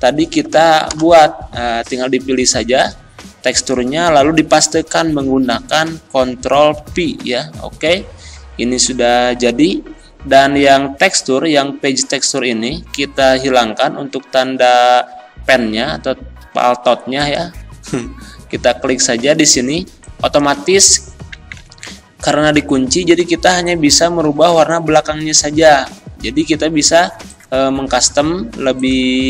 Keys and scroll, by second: 0.9 Return, 6.8 ctrl+v, 21.6 ctrl+z, 24.3 ctrl+z, 25.3 ctrl+z.